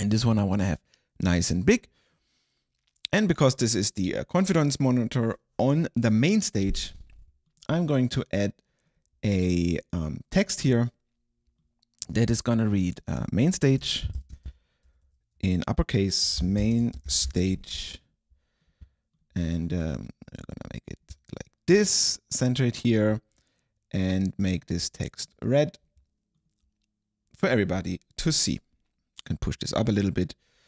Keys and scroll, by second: 13.9 super+a, 14.0-15.1 typing, 16.1-17.9 typing.